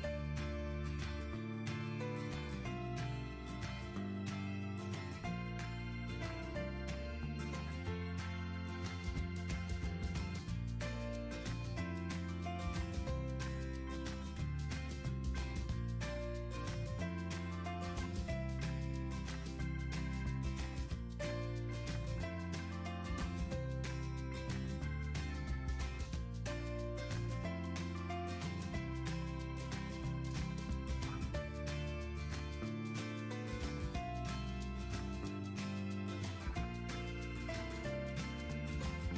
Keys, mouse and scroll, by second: 9.0 typing, 10.4 typing, 10.5 Return, 18.3 typing, 18.5 Return, 35.5 Delete.